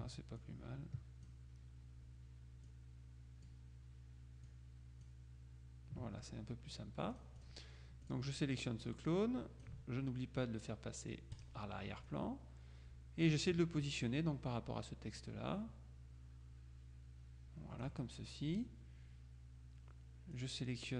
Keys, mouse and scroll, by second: 0.5 ctrl+click, 2.8 click, 4.6 click, 7.2 click, 8.2 click, 9.0-10.2 drag, 11.4 click, 12.2-13.8 drag, 15.3 click, 20.4 click.